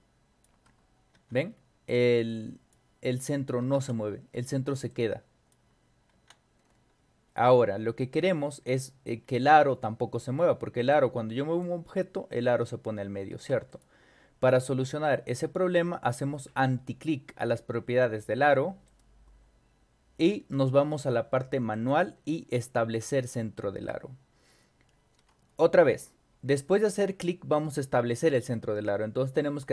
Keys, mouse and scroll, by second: 1.1 ctrl+y, 1.4 middle click, 1.4 scroll up 2, 2.2-2.7 drag, 3.3 scroll up 1, 3.7 ctrl+y, 4.4 middle click, 4.9-5.5 drag, 6.1 ctrl+y, 6.6 middle click, 6.6-6.9 scroll up 2, 8.7 middle click, 8.8 scroll up 2, 9.2 scroll down 2, 9.7-10.1 scroll up 4, 10.9-11.6 drag, 13.3 ctrl+y, 13.7 click, 14.8 scroll down 2, 15.3 scroll up 2, 16.1 scroll down 2, 16.4 scroll up 2, 18.9 right click, 21.7 click, 23.0 click.